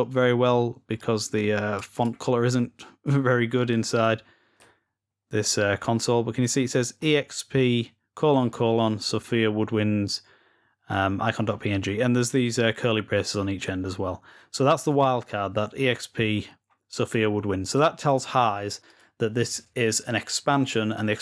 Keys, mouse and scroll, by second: 0.0 click, 0.8 click, 4.6 scroll up 1, 14.6-16.3 scroll down 6, 16.8-18.0 scroll down 2, 18.7 click.